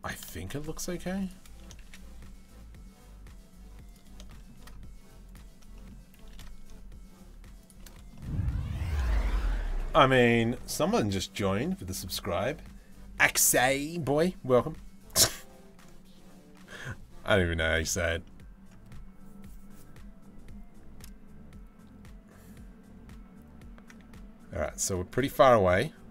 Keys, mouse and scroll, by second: 0.8 click, 1.4 shift+d, 3.9 shift+middle click, 5.8 shift+d, 7.7 middle click, 8.6 shift+middle click, 24.7 click.